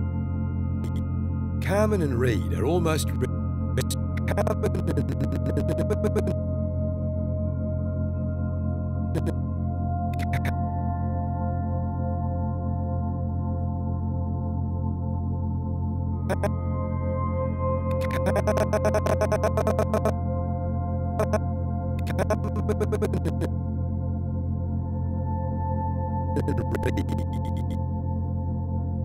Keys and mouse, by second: 1.1 space, 3.1 space, 3.7-8.5 drag, 8.5 Delete, 8.5 typing, 9.1-10.9 drag, 11.4 7, 12.3-13.6 alt+shift+drag, 14.1-15.9 alt+drag, 16.3-20.0 drag, 21.2-23.6 drag, 24.3 g, 25.1 click, 26.3-27.6 drag, 28.1 g.